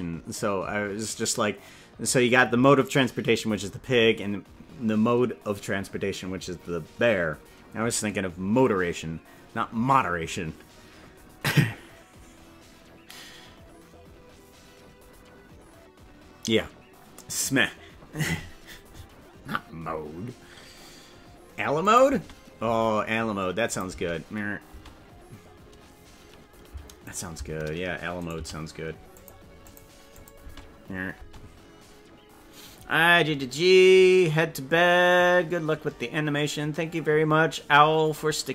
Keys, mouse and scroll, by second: 21.9 click, 22.0 space, 22.7 space, 23.6 click, 23.8 space, 24.7 space, 27.1 shift+right click, 28.1 right click, 28.4 g, 29.6 click, 30.1 click, 30.5 space, 31.3 space.